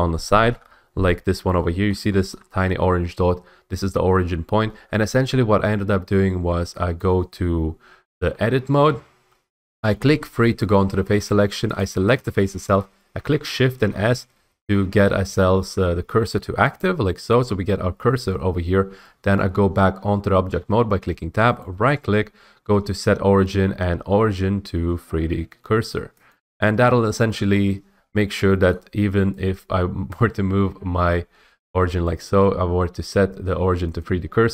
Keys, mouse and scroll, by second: 0.0 shift+middle click, 2.0 middle click, 2.4 shift+middle click, 2.5 middle click, 2.6 middle click, 8.2 Tab, 9.3 3, 11.9 click, 13.9 s, 16.9 click, 19.4 Tab, 21.7-23.8 middle drag, 26.4-28.4 drag, 28.8 middle click, 30.2 click, 32.3 right click, 34.1 click.